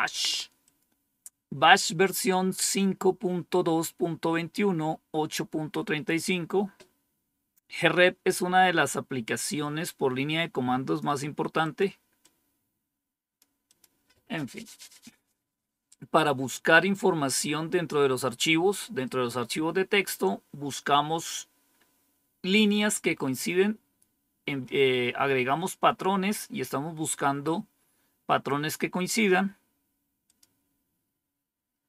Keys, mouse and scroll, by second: 0.5 click, 8.3 click, 11.5 click, 12.1 click, 13.6 click, 25.6 click, 30.2 click.